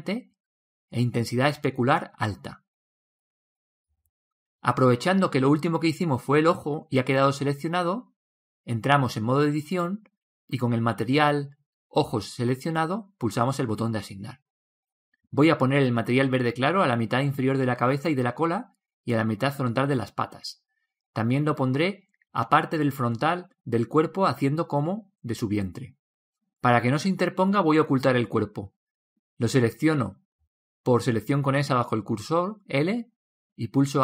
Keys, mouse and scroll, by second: 2.7-6.5 drag, 9.2 Tab, 11.3 click, 14.8-16.5 middle drag, 17.6-18.0 scroll down 1, 18.0-20.8 middle drag, 20.8 KP_3, 22.5 w, 25.0 z, 26.0-30.1 middle drag, 29.5 a, 31.0 l, 33.0 h.